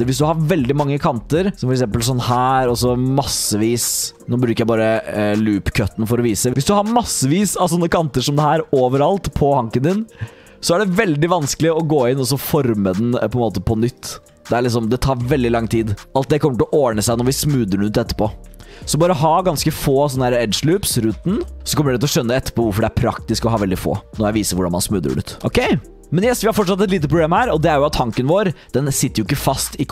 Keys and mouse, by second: 1.3 click, 1.7 g, 2.6 click, 3.1 click, 4.0 ctrl+z, 5.8 g, 7.9 click, 8.3 click, 8.8 click, 9.3 click, 11.8 click, 12.7 alt+click, 13.0 g, 14.3 g, 15.6 alt+click, 16.1 alt+click, 16.4 g, 18.4 ctrl+z, 18.6 ctrl+z, 18.9 ctrl+z, 19.1 ctrl+z, 19.4 ctrl+z, 19.6 ctrl+z, 20.1 ctrl+z, 20.3 ctrl+z, 20.9 ctrl+z, 21.1-21.6 ctrl+z, 25.2 shift+click, 25.6 g, 27.0 middle click, 27.7 middle click, 28.8 middle click, 29.6 click.